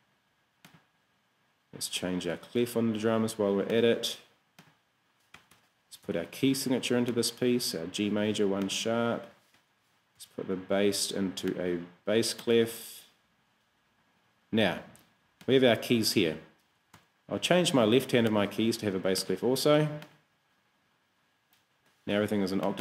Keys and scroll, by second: 2.4 q, 5.4 Escape, 6.8 k, 9.6 Escape, 10.6 q, 17.0 q.